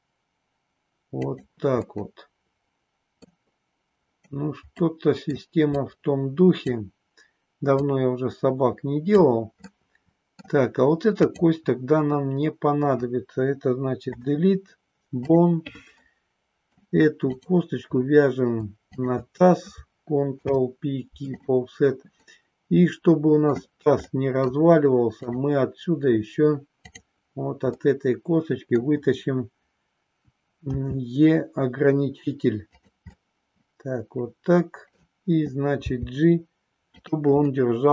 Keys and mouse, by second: 1.8-3.3 middle drag, 4.8 middle click, 5.8 click, 7.6-9.2 drag, 9.6 middle click, 14.0 Delete, 16.0 middle click, 18.8 shift+click, 20.4 ctrl+p, 22.3-23.4 middle drag, 24.0 middle click, 25.1 click, 27.8 middle click, 30.8 e, 32.8 click, 33.1-35.0 middle drag, 35.8 g, 36.9 click, 37.5-37.9 middle drag.